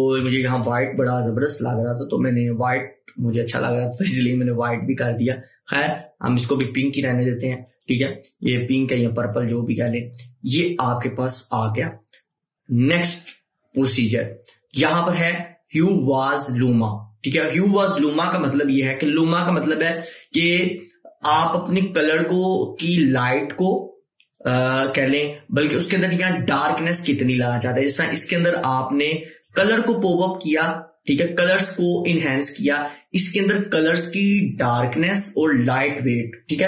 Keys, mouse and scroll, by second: 28.5-30.6 drag, 30.6 scroll down 1, 32.6 scroll down 1.